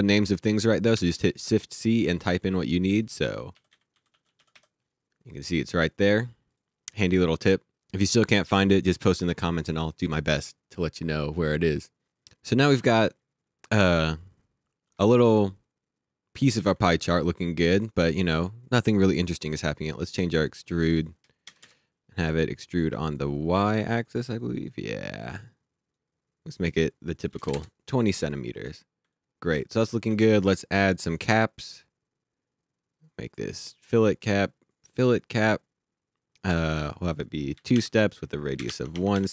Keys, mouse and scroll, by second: 0.9 shift+c, 2.2 typing, 3.3-5.0 typing, 6.5 click, 12.7 alt+Num_Lock, 12.9 alt+click, 15.3 alt+click, 17.7 click, 20.0 click, 21.5 KP_0, 21.6 KP_Enter, 23.9 click, 27.3 KP_2, 27.5 KP_Enter, 28.7-29.0 scroll up 1, 29.1 alt+click, 30.9 click, 32.3-35.6 scroll down 1, 36.8 click, 37.5 KP_2, 37.7 Tab, 38.5 KP_1, 38.7 Tab.